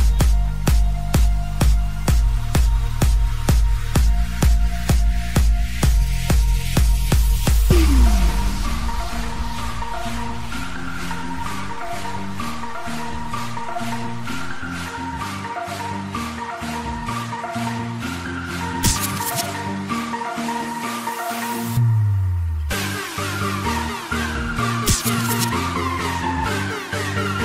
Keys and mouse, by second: 0.6 click, 2.5 space, 6.6 click, 13.5 click, 18.3 click, 21.8 click, 24.0 click, 25.3 click, 26.9 click.